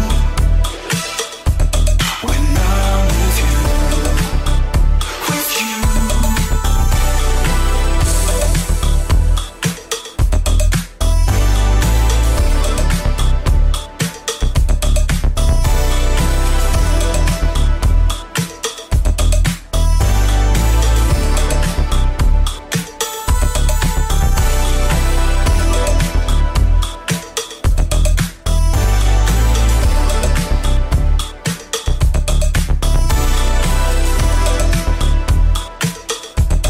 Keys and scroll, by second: 0.1 ctrl+KP_1, 4.1 space, 4.8 ctrl+s, 6.0 f, 7.2 space, 7.8 space, 10.6 -, 11.7 -, 12.9 space, 13.6 -, 31.2 KP_8, 33.8 m, 35.5 ctrl+d.